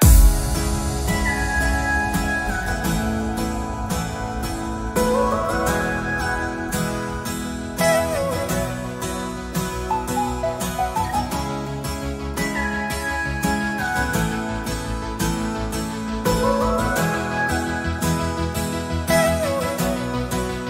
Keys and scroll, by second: 4.7 alt+space, 6.7 alt+space, 11.1 space, 17.6 space.